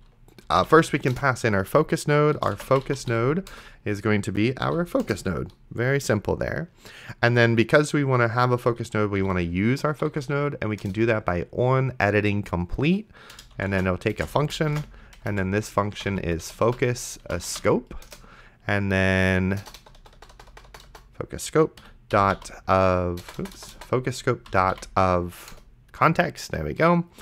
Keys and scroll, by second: 0.2-1.1 typing, 1.1 Return, 2.5-3.6 typing, 4.7 End, 5.0 Return, 8.9-10.6 typing, 10.8 Return, 13.6-17.3 typing, 18.1 Return, 19.6 BackSpace, 20.2 BackSpace, 20.7 BackSpace, 21.8 Right, 21.9-23.2 typing, 24.2-25.2 typing, 25.5 Return.